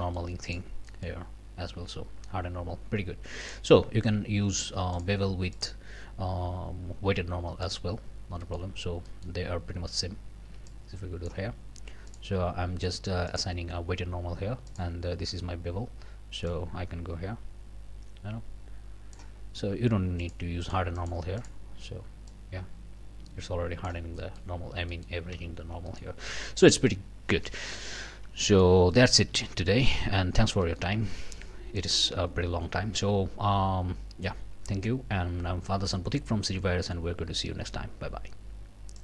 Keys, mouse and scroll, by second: 0.0 middle click, 0.5 click, 0.9 middle click, 3.4 click, 5.0 click, 5.6 click, 7.7 click, 8.4 click, 8.8 scroll up 1, 9.1 click, 10.7 click, 12.1 click, 13.3 click, 14.7 click, 16.5-19.4 drag, 20.2 click, 20.6 click, 21.4 click, 22.3-24.1 drag, 24.2 click, 24.6 scroll up 2, 24.9 middle click, 25.3 alt+a, 25.6 alt+scroll down 2, 25.9 alt+middle click, 27.3 scroll down 2, 27.7 middle click, 28.1 scroll down 2, 28.4 shift+middle click, 28.9 shift+middle click, 29.5 shift+middle click, 30.1 shift+scroll up 1, 30.6 middle click, 31.1 scroll down 1, 31.8 click, 33.5-39.0 middle drag.